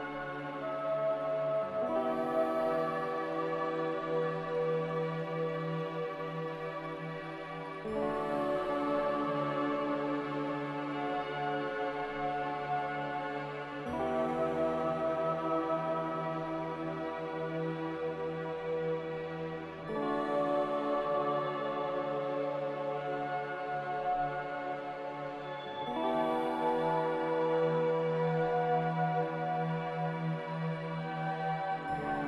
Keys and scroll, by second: 15.7 m.